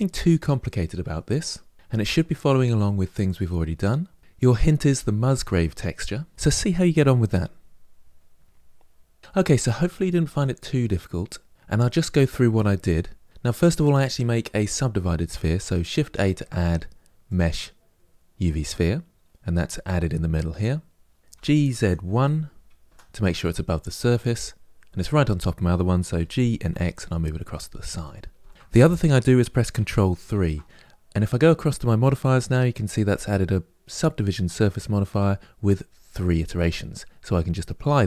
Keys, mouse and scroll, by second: 10.9-16.1 scroll down 1, 16.1-18.5 scroll down 1, 18.5 shift+a, 21.2 g, 23.8-26.0 middle drag, 26.0 g, 28.2-30.2 shift+middle drag, 30.2 ctrl+3, 37.6-38.0 drag.